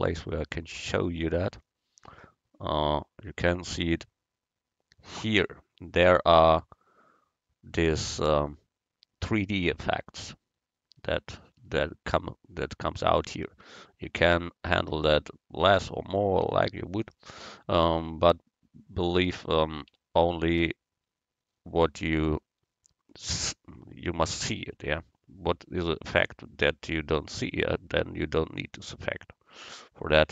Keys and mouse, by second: 1.9 click, 16.6-18.6 drag.